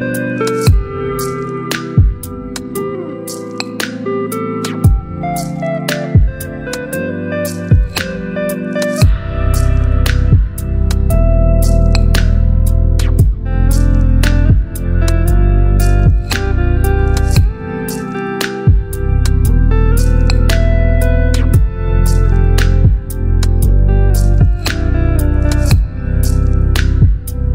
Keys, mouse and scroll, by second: 7.0 alt+BackSpace, 7.9 ctrl+d, 9.8-16.0 drag, 11.3-13.4 drag, 16.3 click, 20.6 shift+h, 22.6-26.1 typing, 26.1 Return.